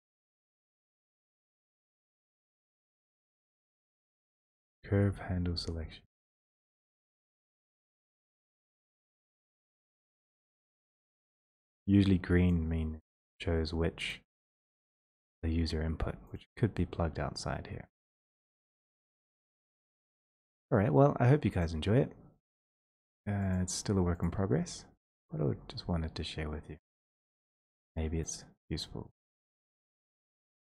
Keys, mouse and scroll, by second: 2.1-2.9 scroll, 3.5-4.4 scroll, 4.4-4.9 scroll, 6.6-7.1 scroll, 7.7 scroll, 9.3-10.1 scroll, 10.3 middle click, 11.7 click, 12.5 click, 14.1 click, 14.5 click, 15.1 click, 16.4 click, 19.0 click, 19.5 click, 20.3 click, 20.4 click, 20.6 click, 20.7 click, 20.8 click, 21.4 middle click, 21.6 click, 23.6 click, 24.2 click, 25.3 click, 27.1 click, 28.3 right click, 28.8 middle click, 28.9 middle click, 30.0 click.